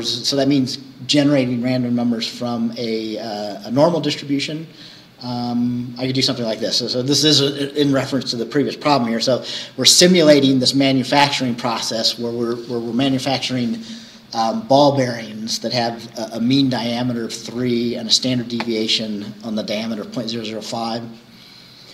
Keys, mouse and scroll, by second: 4.9-5.3 scroll down 1.